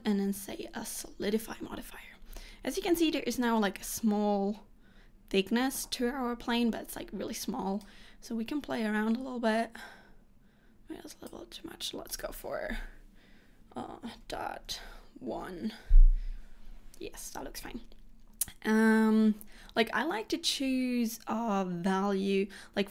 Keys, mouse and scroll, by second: 2.2 scroll up 4, 3.1 middle click, 8.0 click, 12.3 click.